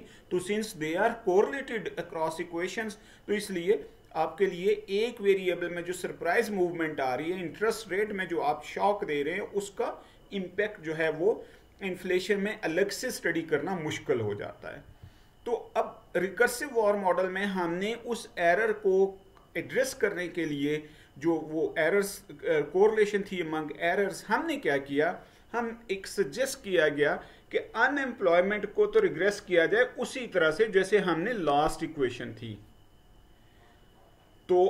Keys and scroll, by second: 14.9 Right.